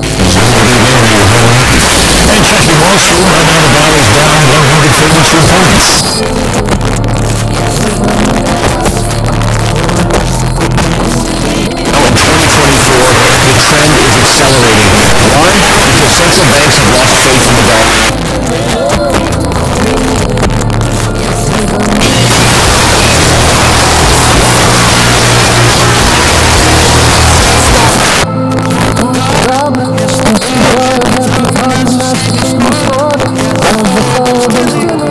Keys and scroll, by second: 6.0 Page_Down, 17.9 Page_Down, 27.9 Page_Down.